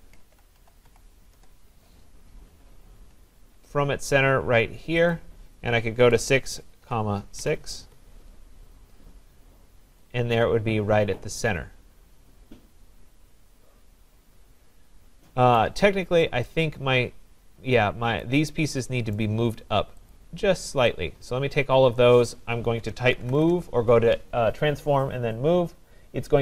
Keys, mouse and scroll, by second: 0.0-1.4 typing, 2.7-3.8 scroll, 3.1 Return, 5.1 click, 6.1-7.4 typing, 7.8 Return, 8.6-8.9 typing, 8.8 scroll, 8.8 Return, 9.0 Return, 9.0-9.4 scroll down 8, 9.5 scroll up 4, 15.6 right click, 16.1-16.5 scroll down 3, 18.0 scroll, 18.2 right click, 18.8-19.2 scroll, 19.5 right click, 20.1 click, 21.5 click, 22.7-23.8 typing.